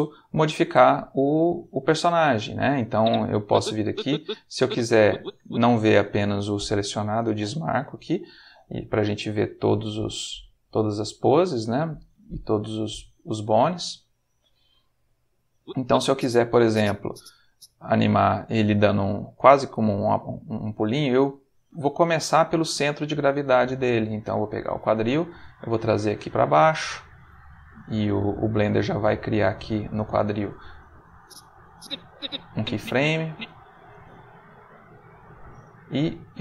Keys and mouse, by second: 2.0 middle click, 2.9-5.4 drag, 7.3 click, 9.5 click, 10.3-11.3 middle drag, 11.7 click, 12.1-13.2 middle drag, 14.2 click, 15.5-17.4 drag, 21.6 g, 23.3 Escape, 24.5 g, 25.3 space, 27.3 middle click, 31.1-33.3 drag, 33.7 g.